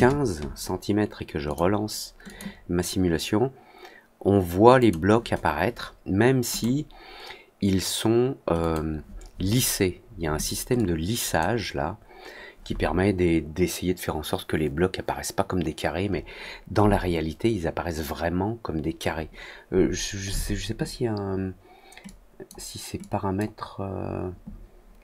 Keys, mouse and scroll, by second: 1.4 click, 2.2 click, 4.7 click, 6.4 click, 8.5 click, 10.7-11.3 drag, 22.0 click, 22.9 click.